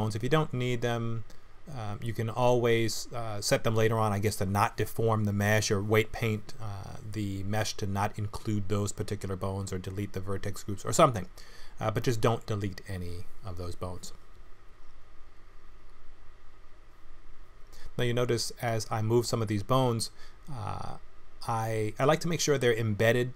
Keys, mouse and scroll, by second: 1.0 g, 2.7 click, 3.3 click, 3.9 scroll up 2, 4.1 middle click, 6.9 r, 10.1 middle click, 11.1 KP_1, 11.9 r, 13.4 click, 14.4 l, 15.0 r, 16.0 r, 18.3 middle click, 20.0 click, 20.4 middle click, 21.9 click, 22.7 KP_1.